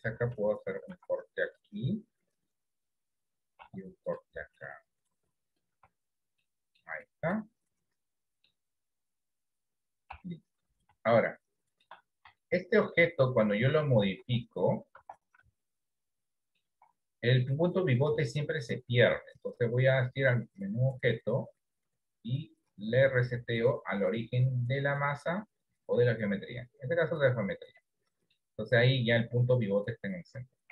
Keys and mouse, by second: 0.9 ctrl+r, 3.7 ctrl+r, 5.9 Tab, 6.5 middle click, 7.4-8.5 middle drag, 8.8-10.2 right drag, 10.2 KP_1, 11.4 shift+middle click, 12.5 shift+middle click, 13.3 middle click, 14.3 Tab, 15.2 Tab, 15.6-16.6 middle drag, 18.3 shift+middle click, 20.1-27.3 drag, 27.9 middle click, 29.2 click.